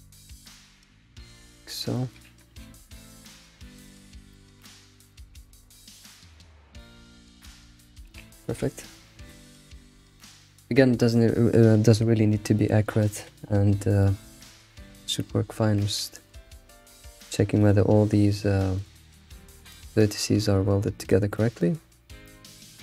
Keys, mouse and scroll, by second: 0.3 click, 0.5 g, 1.9 shift+middle click, 2.2 scroll down 2, 2.6 ctrl+s, 3.0 shift+middle click, 3.2 scroll up 3, 4.1 scroll up 2, 4.3 shift+middle click, 4.5 scroll down 1, 4.6 scroll up 4, 5.1 click, 5.4 g, 6.5 click, 6.7 g, 7.9-8.3 scroll down 7, 8.6 ctrl+s, 8.9 scroll down 3, 14.0-14.5 shift+middle drag, 14.5 Tab, 14.8-15.4 scroll down 3, 15.4-15.7 scroll up 4, 15.7 Tab, 16.1-16.4 shift+middle drag, 16.4 scroll up 2, 17.6 click, 18.8 click, 19.1 Tab, 20.0-20.4 scroll up 2, 21.1 click, 22.1 scroll down 2, 22.3-22.8 shift+middle drag.